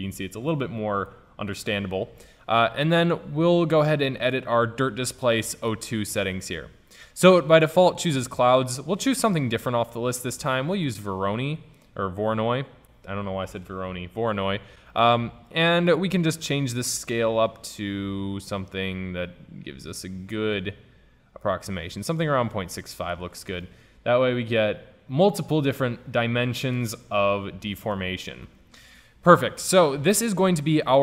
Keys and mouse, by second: 1.5 ctrl+z, 5.7-7.5 drag, 7.9-9.8 drag, 15.6-17.2 middle drag, 17.2-19.1 drag, 22.5 middle click, 23.0-23.7 middle drag, 23.7-25.6 drag, 28.5 ctrl+z.